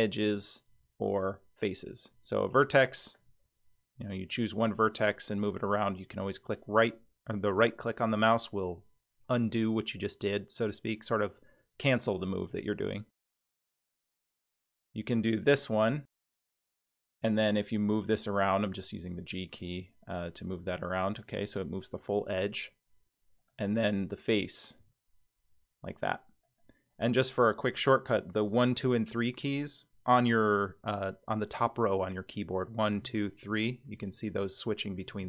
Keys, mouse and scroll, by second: 2.8 click, 3.5 g, 13.9 click, 16.3 click, 17.5 g, 23.5 click, 24.2 click, 24.8 g, 32.7-35.2 typing.